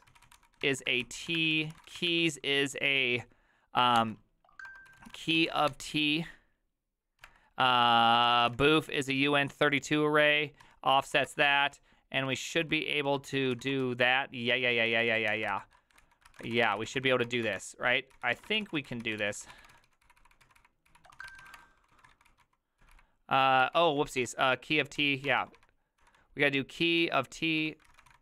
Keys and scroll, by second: 0.0-2.5 typing, 4.0-9.2 typing, 10.4-15.8 typing.